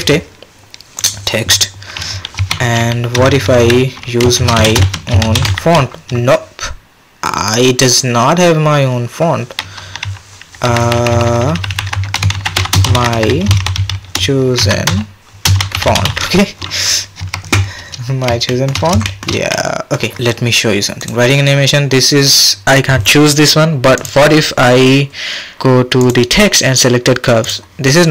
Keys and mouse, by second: 2.4 Tab, 3.2-5.4 typing, 10.7-16.0 typing, 17.2 Tab, 19.0 shift+click, 19.5 click, 21.0-21.9 drag, 24.0-27.8 drag.